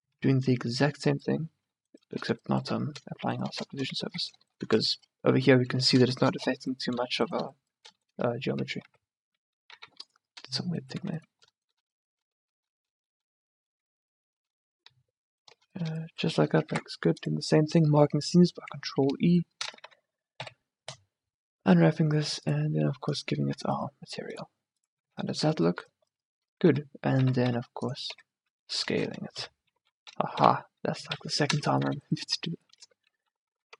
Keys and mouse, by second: 0.3 Tab, 1.5-3.1 middle drag, 3.7 middle click, 4.1 ctrl+z, 9.0 z, 9.9 a, 11.1 z, 16.8 ctrl+e, 19.7 a, 20.0 a, 20.5 u, 23.4 Tab, 25.1 a, 25.9 click, 26.7 Tab, 27.2 s, 28.3 Tab, 29.5 m, 30.5 2, 31.2 1, 32.0 a, 33.0 Tab, 33.6 a.